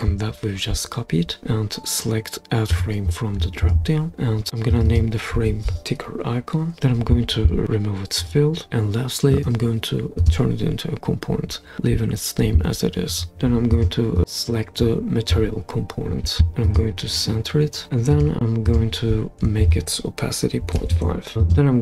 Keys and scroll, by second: 19.6 Tab, 20.6 BackSpace, 20.7 5, 20.9 Return.